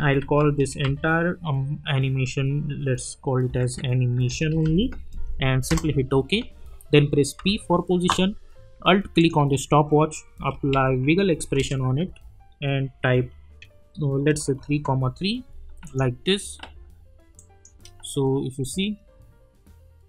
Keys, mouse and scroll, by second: 0.0-1.3 typing, 3.3-5.1 typing, 5.7 Return, 7.4 p, 9.2 alt+click, 10.0-11.4 typing, 11.6 Return, 13.6-15.3 typing, 15.8 click, 17.7 space.